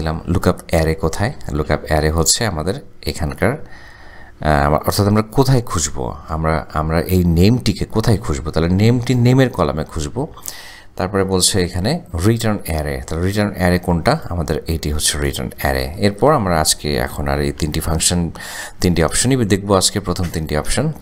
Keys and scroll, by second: 11.6 ,, 19.1 shift+0.